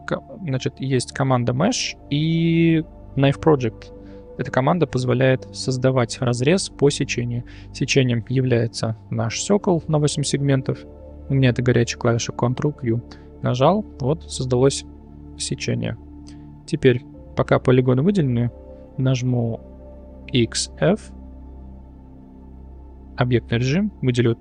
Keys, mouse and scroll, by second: 0.2-7.4 drag, 14.1-14.6 middle drag, 15.2 middle drag, 21.3-21.6 middle drag, 21.3 x, 22.6 Tab, 24.0 click.